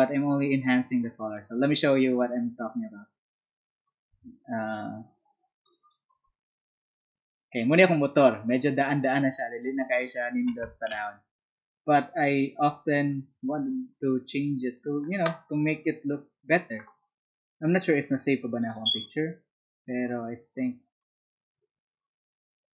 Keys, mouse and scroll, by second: 1.0 shift+click, 2.2 shift+click, 5.6 shift+click, 5.7 shift+click, 13.8 Escape, 18.7 click.